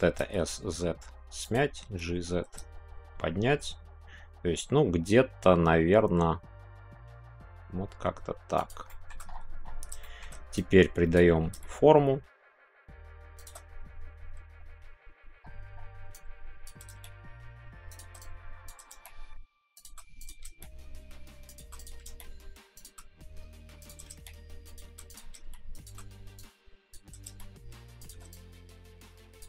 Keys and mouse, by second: 8.5 shift+click, 8.8 shift+middle click, 10.0 shift+middle click, 10.5-13.5 drag, 16.2 click, 16.9 shift+g, 18.0 click, 18.2 click, 18.8 g, 19.7 click, 20.4 g, 22.0 g, 22.7 shift+click, 24.1 g, 25.0 click, 25.4 shift+g, 25.7 click, 26.4 click, 27.3 g, 28.1-29.4 drag.